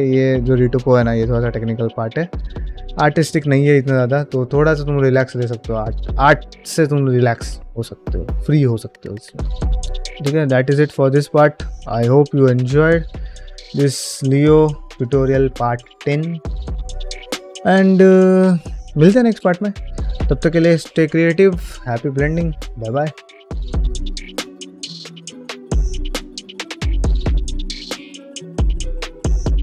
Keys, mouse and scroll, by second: 9.5 shift+middle drag, 9.8 scroll up 7, 9.9 shift+middle drag, 10.3-11.7 middle drag, 11.9-12.5 scroll down 4, 12.5 shift+middle click, 13.5 ctrl+middle click, 13.9-14.5 shift+middle drag.